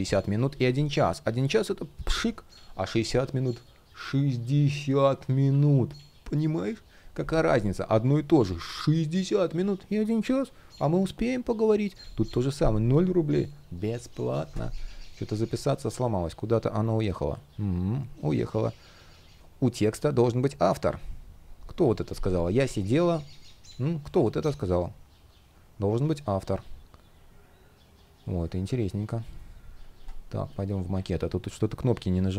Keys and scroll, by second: 28.1 shift+o, 31.3 shift+o.